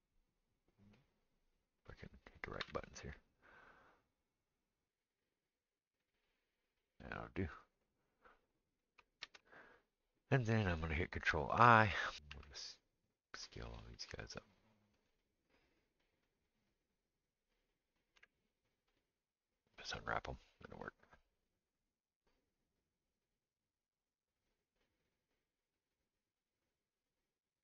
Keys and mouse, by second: 2.6 g, 4.9 r, 7.4-12.0 drag, 9.3 ctrl+space, 11.6 ctrl+i, 12.0-13.6 middle drag, 12.4 s, 13.6-15.1 drag, 13.9 s, 15.1-25.1 middle drag, 18.2 u, 25.1-26.6 drag, 26.6-27.6 middle drag.